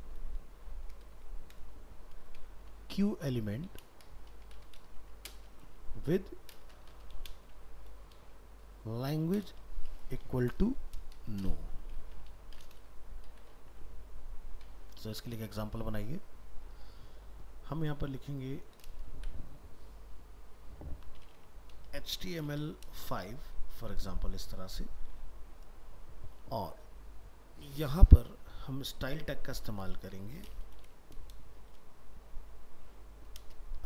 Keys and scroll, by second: 23.8 ctrl+s.